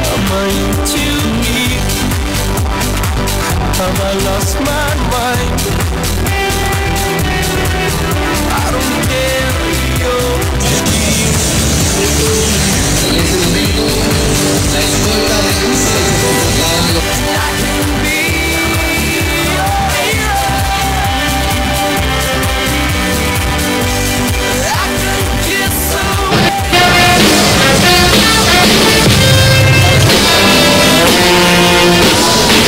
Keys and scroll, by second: 17.2 Page_Down.